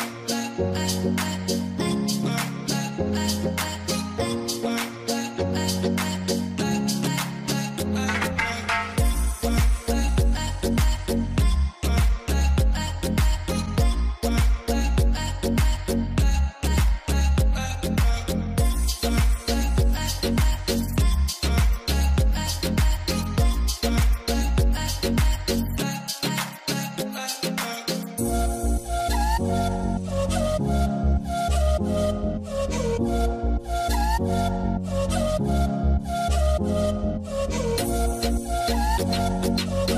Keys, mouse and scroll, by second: 0.4 alt+scroll down 1, 3.3 right click, 5.5 double click, 9.8 right click, 17.1 double click, 17.5 ctrl+z, 18.5 ctrl+z, 26.2 alt+scroll down 1, 26.9 alt+scroll up 1, 27.5 alt+scroll down 1, 32.5 alt+scroll down 1, 32.8 alt+scroll up 1.